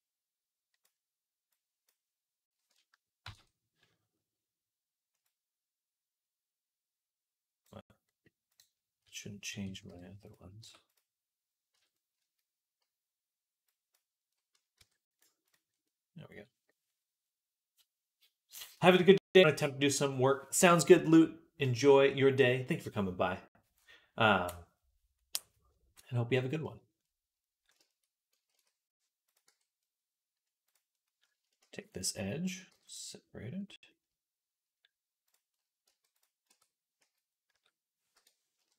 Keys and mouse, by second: 3.1 ctrl+l, 7.9 middle click, 9.3 l, 9.7 p, 10.4 Tab, 11.6 Tab, 11.8 click, 11.9-13.6 middle drag, 12.0 a, 13.6-14.6 drag, 14.6 Tab, 15.7-26.9 drag, 15.7 middle click, 15.7-26.9 right drag, 28.4 ctrl+s, 29.3 Tab, 30.8-32.3 right drag, 31.4 shift+d, 32.3-35.1 middle drag, 32.5 p, 35.1 click, 35.1 right click, 35.1-38.7 middle drag, 35.7 Tab, 36.3 Tab, 36.8 a, 37.3 s, 38.4 KP_1.